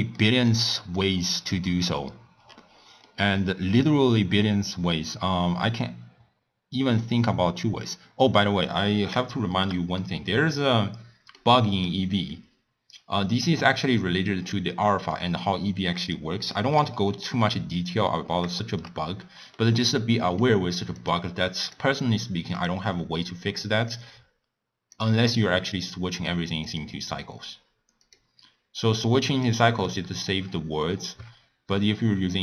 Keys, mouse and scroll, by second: 0.1-2.1 middle drag, 2.1-2.7 scroll down 6, 2.7 scroll up 1, 3.0-7.3 middle drag, 9.3-11.7 shift+middle drag, 11.7 click, 12.3-15.3 middle drag, 16.0 click, 16.5-18.0 shift+middle drag, 18.0-18.6 scroll up 5, 18.6 shift+middle click, 19.0-19.5 scroll down 2, 19.5-21.0 middle drag, 21.0 click, 21.6 click, 22.5 click, 23.9-26.7 drag, 28.0-31.2 drag.